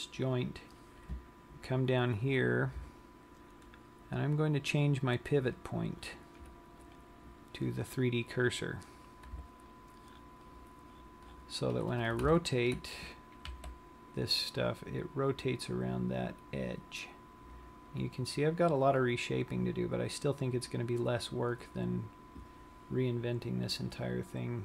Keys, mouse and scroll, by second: 14.1 r, 21.8 click, 23.2-24.6 scroll up 3.